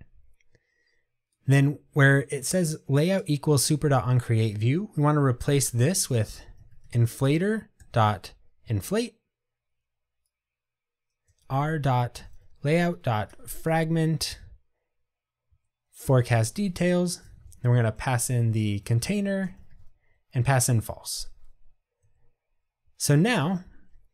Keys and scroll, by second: 8.7 Tab, 16.2 Return, 18.9 Tab.